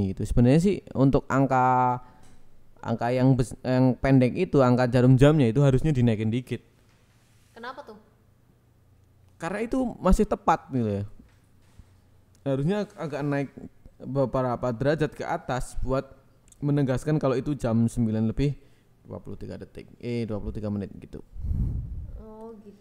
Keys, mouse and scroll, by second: 12.6 click, 13.6 g, 13.8 z, 15.1 click, 17.8 click, 19.7 click, 20.7 e, 20.9 click, 21.7 click.